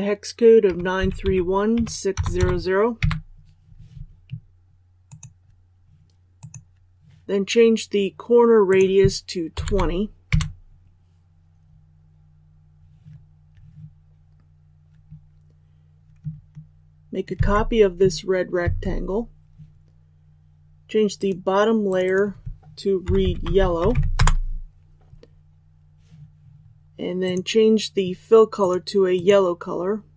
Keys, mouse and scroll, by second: 17.3 ctrl+c, 18.6 ctrl+v, 21.1 click, 24.1 Return, 27.2-30.1 drag.